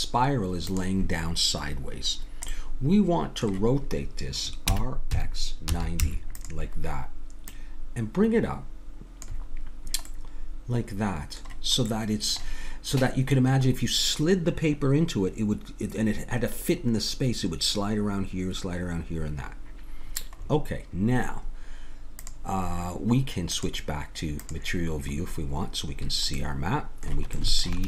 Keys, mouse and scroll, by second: 2.5-4.6 middle drag, 4.6 r, 7.4-10.1 drag, 10.1-13.5 middle drag, 20.4-22.2 middle drag, 22.2-25.2 drag, 25.2-27.8 middle drag.